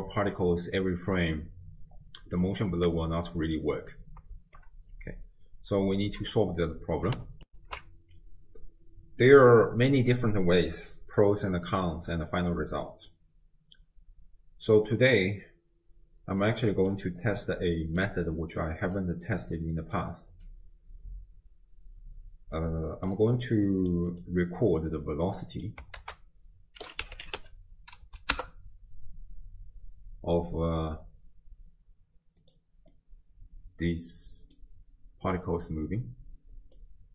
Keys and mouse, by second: 4.4 shift+space, 7.7 ctrl+alt+shift+q, 13.1-16.9 middle drag, 18.0 right click, 19.3 middle click, 22.6 middle click, 23.7 middle click, 24.1 click, 25.1 middle click, 26.0 ctrl+a, 32.9-34.6 middle drag, 35.4-36.8 drag.